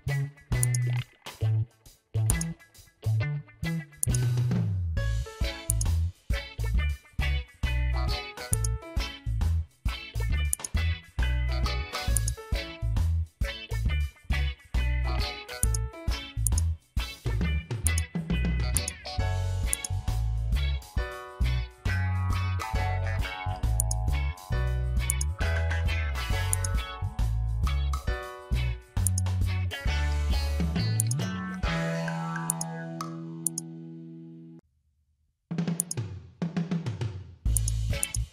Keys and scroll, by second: 31.7 ctrl+z.